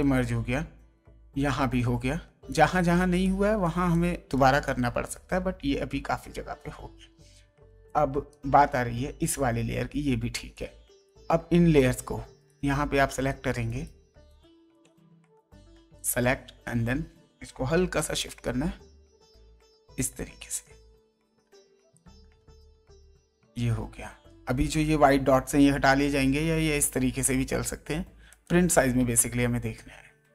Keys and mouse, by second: 2.2 space, 2.5 click, 3.2 click, 3.9 click, 4.6 click, 7.7 space, 7.8 click, 10.3 space, 10.5 click, 12.4 right click, 15.9 ctrl+click, 17.8 ctrl+Up, 20.4 ctrl+Down, 21.4 ctrl+Right, 21.9 ctrl+Left, 23.0 ctrl+Right, 28.3 ctrl+click, 29.3 ctrl+Up.